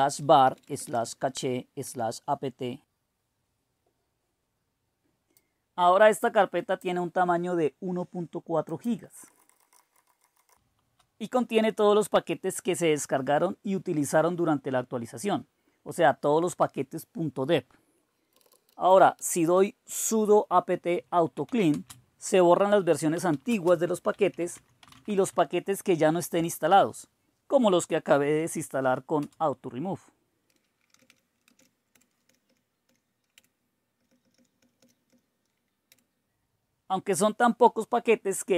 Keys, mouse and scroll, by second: 0.0-1.8 typing, 5.4-9.2 drag, 8.9-12.4 typing, 14.2-18.3 drag, 18.3-26.7 typing, 29.2 Return, 30.7-32.1 typing, 32.3 Up, 32.5 Up, 32.9 Up, 33.4 Return, 34.0 Up, 34.2 Up, 34.3 Up, 34.6 Up, 34.8-35.1 Up, 35.9 Return, 38.2 typing.